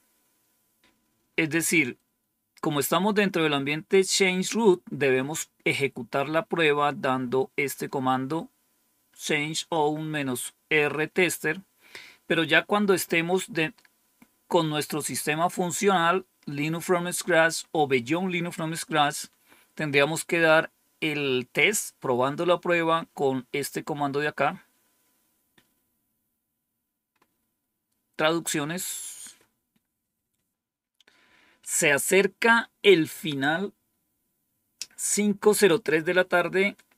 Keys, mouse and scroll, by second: 25.7-27.0 scroll down 2, 27.0-36.9 scroll up 2.